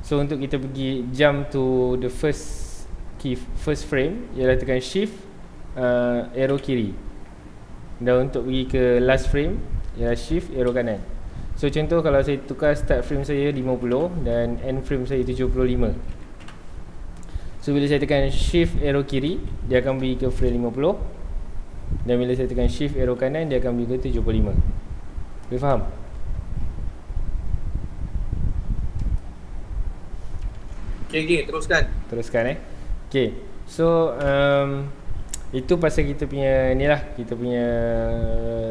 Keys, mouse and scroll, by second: 0.2-6.5 shift+middle drag, 6.5 shift+Left, 10.6 shift+Right, 12.5-14.0 drag, 14.0 KP_Enter, 15.1-16.5 drag, 16.5 KP_Enter, 19.3 shift+Left, 23.0 shift+Right, 29.0-31.1 drag, 31.1 KP_Enter, 32.4-34.3 drag, 34.3 KP_Enter.